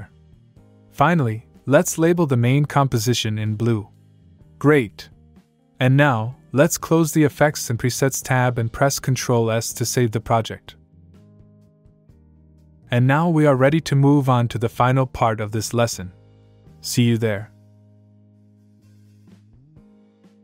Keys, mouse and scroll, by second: 2.4 click, 4.9 click, 6.8 click, 7.6 click, 8.5 click, 10.5 ctrl+Num_Lock, 10.5 ctrl+s.